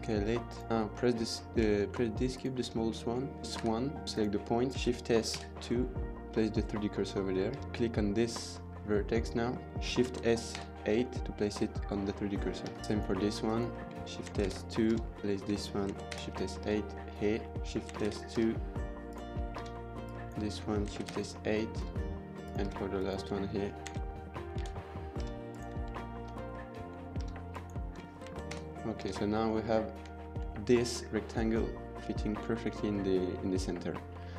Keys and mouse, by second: 0.7-1.0 drag, 1.6 shift+middle click, 2.1 click, 2.5 Tab, 3.6 1, 4.0 click, 4.7 shift+s, 7.4 Tab, 7.6 Tab, 7.6-8.0 middle drag, 10.0 shift+s, 11.2 middle click, 12.5 Tab, 12.6 middle drag, 12.8 Tab, 12.8 drag, 13.2 click, 14.2 shift+s, 14.8 Tab, 15.2 Tab, 15.8 shift+s, 16.6 Tab, 16.9-17.3 middle drag, 17.6 shift+Tab, 17.9 shift+s, 18.3 Tab, 18.9 click, 19.4 Tab, 19.9 drag, 20.8 shift+s, 21.6 Tab, 22.3 click, 22.5 Tab, 22.7 drag, 23.8 shift+s, 25.2 Tab, 25.3 click, 27.0 Tab, 27.3 drag, 28.2 shift+s, 28.9 Tab, 29.3-29.8 middle drag, 30.0 shift+middle drag, 30.3 middle drag, 32.7-33.4 middle drag, 33.7 click.